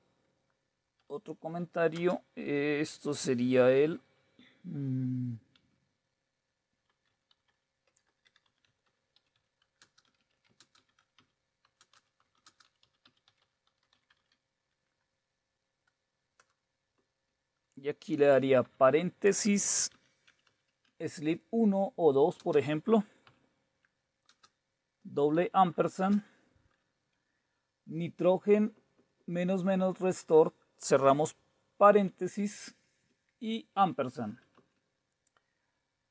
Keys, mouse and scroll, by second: 1.0 #, 2.0 typing, 5.5 typing, 6.9-14.7 typing, 16.3 Return, 16.9 Right, 18.7-21.3 typing, 22.3-23.2 typing, 24.2 typing, 25.4-26.0 typing, 27.5 Right, 28.1 Right, 28.2-28.5 Right, 31.8-32.6 typing, 33.2 Right, 34.6 Right.